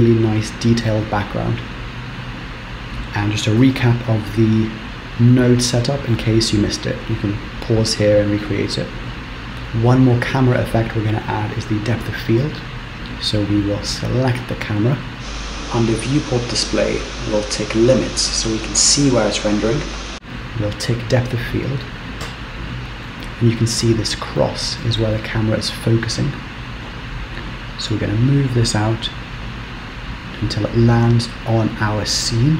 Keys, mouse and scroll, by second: 14.5 click, 20.1 click, 21.4 click, 22.5 z, 22.8 shift+middle click, 25.3 shift+scroll down 1, 25.4 shift+middle click, 28.2 click, 31.3 middle click.